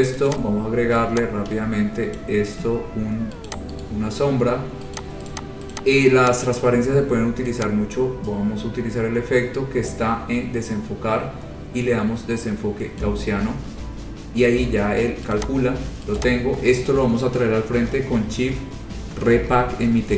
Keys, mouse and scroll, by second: 0.5 click, 0.7 scroll, 2.4 click, 3.7 click, 4.1 right click, 5.2 click, 5.2 right click, 5.5 click, 5.9 click, 6.7 click, 13.2 click, 15.6 click, 16.4 click, 19.7 Page_Up.